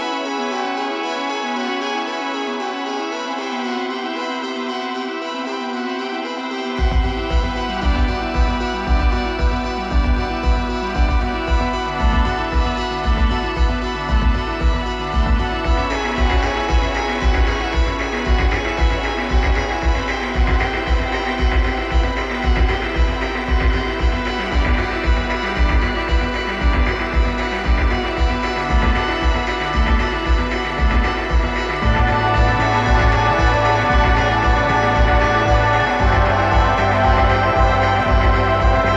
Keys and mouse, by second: 2.3 click, 2.9-3.9 drag, 5.7-7.6 drag, 8.7-10.5 drag, 11.1-12.8 drag, 13.9-15.7 drag, 19.6-20.8 right drag, 20.8 click, 22.1-24.1 drag, 28.5-34.2 drag, 29.8 right click, 31.2 right click.